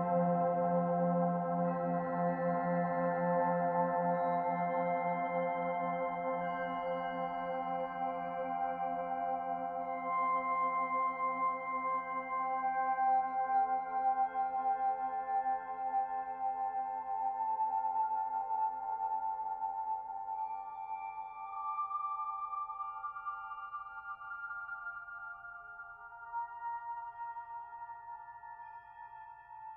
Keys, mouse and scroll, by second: 7.2 click, 9.4 n, 11.0 click, 11.9 shift+click, 12.7 click, 13.6 shift+click, 19.0 e, 25.0 click, 27.6 s.